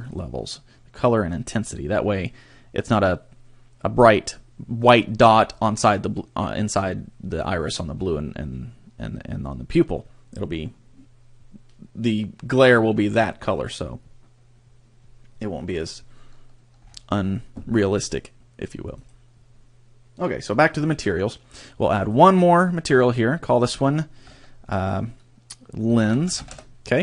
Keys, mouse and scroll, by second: 0.1 click, 16.8-19.0 scroll up 6, 19.0 click, 19.0 scroll up 2, 21.9 click, 23.0 click, 23.6 click.